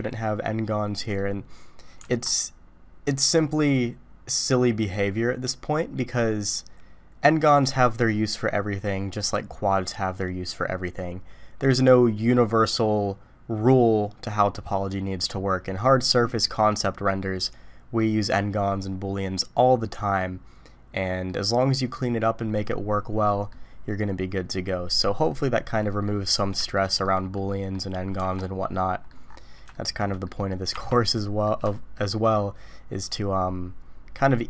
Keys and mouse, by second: 1.0 middle click, 2.0 alt+a, 20.2-21.3 middle drag, 23.3 middle click, 25.0-26.0 middle drag, 26.7-27.0 shift+middle drag, 27.3 middle click, 28.2 Tab, 28.7-29.1 middle drag, 29.7 shift+middle drag, 30.2 middle drag, 30.7 Tab, 31.1 middle click, 31.7 shift+middle click.